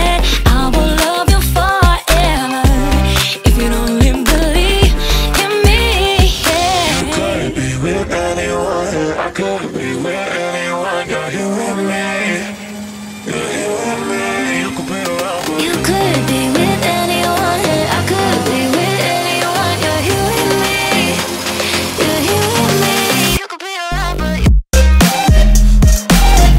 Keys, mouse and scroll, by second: 1.0-1.6 scroll down 1, 1.6 scroll up 1, 1.8-3.3 shift+middle drag, 3.3-3.8 scroll up 3, 3.8-4.3 scroll down 1, 4.3-6.0 shift+middle drag, 6.0 scroll down 1, 6.5 scroll up 1, 6.8-7.3 scroll down 1, 7.3-7.7 shift+middle drag, 7.7-8.3 scroll down 2, 8.3 middle click, 8.7-9.8 scroll up 2, 9.8-11.3 middle drag, 11.3-13.9 drag, 13.9-14.3 shift+middle drag, 14.3 scroll up 2, 15.0-17.9 middle drag, 17.9 scroll down 1, 18.0 scroll up 1, 18.3 scroll down 1, 18.3 scroll up 1, 18.5-18.9 scroll down 5, 18.9-19.3 scroll up 2, 19.3-19.6 scroll down 2, 19.6-20.2 scroll up 1, 20.6 click, 21.8-22.3 scroll down 1, 23.2-24.2 shift+middle drag, 24.2-25.2 scroll down 3, 25.2-25.5 scroll up 1, 25.5-26.1 scroll down 1, 26.1-26.5 scroll up 1.